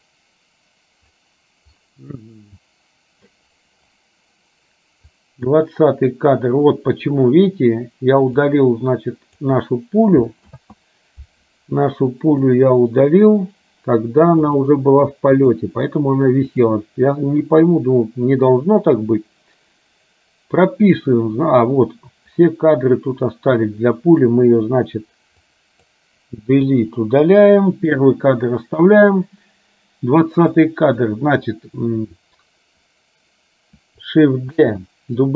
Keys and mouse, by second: 5.4 click, 8.8 click, 10.6 ctrl+z, 12.6 click, 14.7 click, 17.7-21.1 drag, 23.8 click, 25.6 click, 26.8 Delete, 30.7 click, 34.6 shift+d.